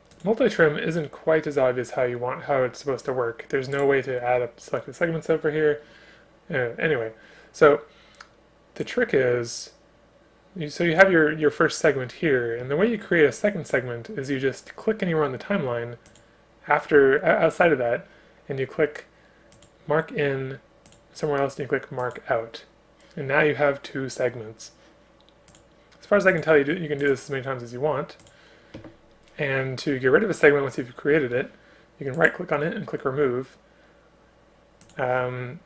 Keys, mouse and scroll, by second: 0.6 ctrl+click, 25.9 space, 35.1 space.